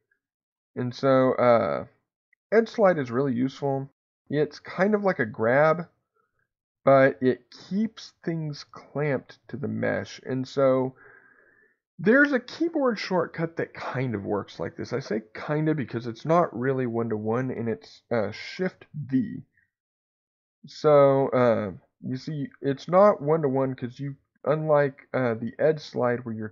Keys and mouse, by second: 4.1 alt+click, 6.4-15.9 drag, 15.9 Escape, 19.3 shift+v.